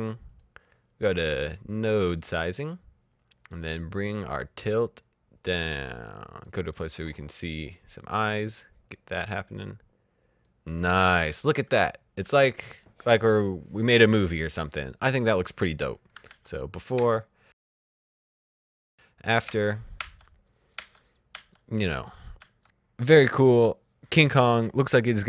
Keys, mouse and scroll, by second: 1.5 click, 4.5 click, 16.0 alt+Num_Lock, 22.2 alt+Num_Lock, 22.2 typing.